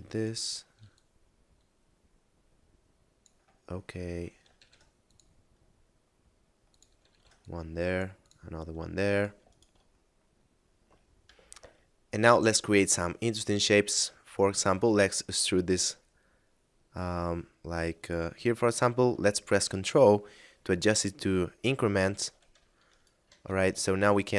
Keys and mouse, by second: 0.1 right click, 0.9 click, 3.7 middle click, 4.6 ctrl+r, 4.9 click, 7.1 ctrl+r, 7.4 click, 9.1 right click, 9.5 shift+right click, 11.3 F9, 14.7 e, 22.1 ctrl+click, 22.9 shift+right click, 23.4 right click, 23.9 shift+right click, 24.1 e.